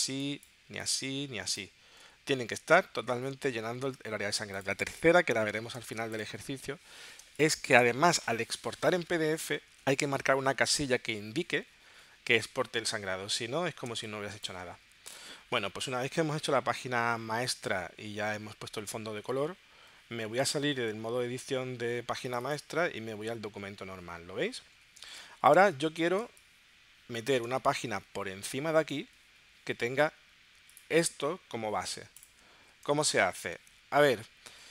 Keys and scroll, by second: 5.8 space, 7.2 space, 25.0 space.